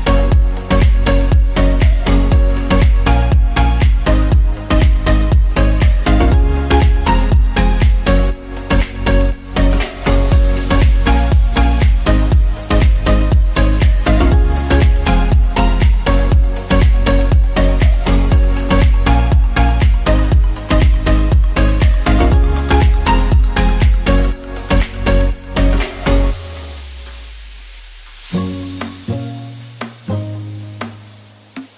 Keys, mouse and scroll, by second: 1.5 g, 1.5 y, 5.3 g, 5.7 z, 6.4 g, 6.7 z, 17.8 ctrl+z, 20.3 ctrl+z.